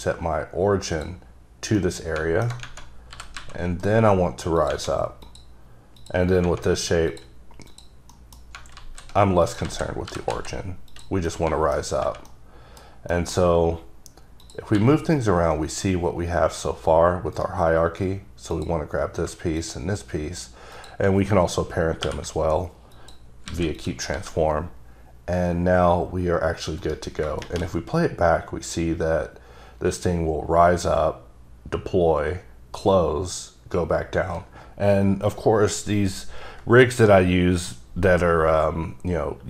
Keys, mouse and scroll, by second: 1.0 click, 1.9 middle click, 3.3 g, 3.5 z, 4.7 click, 5.4 click, 6.1 click, 7.2 click, 7.8 click, 8.2 middle click, 8.9 alt+z, 9.6 click, 9.8 alt+z, 10.2 g, 10.4 z, 11.0 click, 11.4 middle click, 12.4 middle click, 13.0 scroll down 1, 13.3 middle click, 13.8-14.6 scroll down 1, 14.6 click, 14.9 g, 17.5 right click, 18.7 click, 19.4 shift+click, 19.7 shift+click, 20.9 shift+double click, 22.2 ctrl+p, 23.1 click, 23.6 alt+a, 23.9 click, 24.3 g, 26.9 right click.